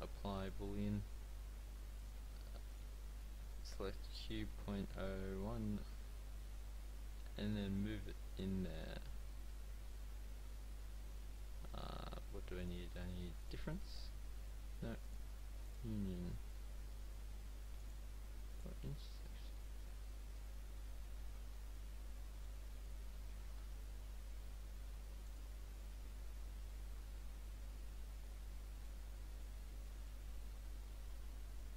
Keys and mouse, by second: 0.5-6.3 drag, 5.9 g, 9.0-12.7 drag, 10.0 z, 12.7 middle click, 13.9-17.8 drag, 17.1 z, 21.2 z, 23.5 s, 25.9 click, 27.0 g, 30.3 z, 31.3 g.